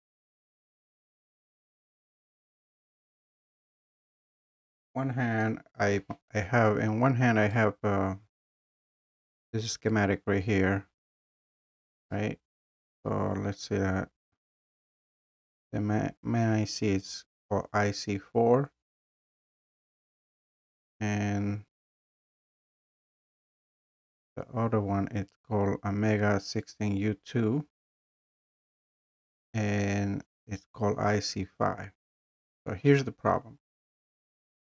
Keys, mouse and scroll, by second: 7.6 click, 9.0 click, 11.9 click, 12.1 click, 13.7 scroll, 14.7 scroll, 15.5 scroll, 18.8-19.9 scroll, 20.5 scroll down 3, 22.3 click, 22.5 click, 22.5 scroll down 3, 23.8 scroll, 23.9 scroll down 3, 27.3 scroll, 28.9 scroll up 1, 31.5 scroll, 31.7-33.7 scroll down 2, 33.7-34.6 scroll.